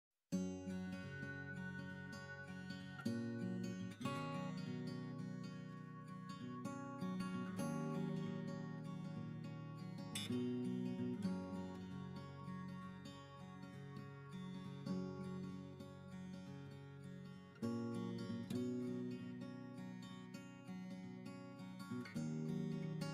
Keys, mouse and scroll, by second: 4.6 click, 10.3-11.4 drag, 12.9 click, 14.4-15.3 shift+drag, 17.2 ctrl+l, 19.2 middle drag, 20.1-21.2 shift+middle drag.